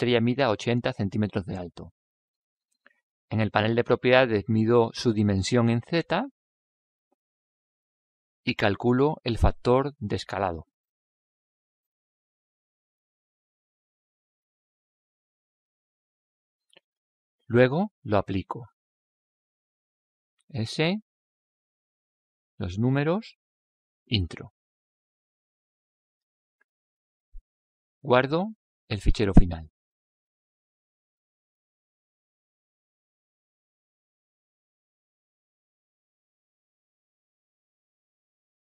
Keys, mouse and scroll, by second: 1.8-3.5 drag, 3.6 drag, 14.1 s, 31.3 ctrl+s.